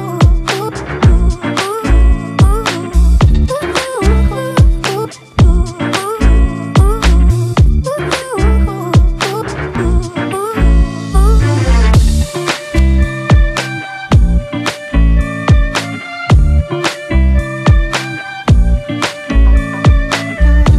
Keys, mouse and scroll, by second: 6.1 right click, 7.6 double click.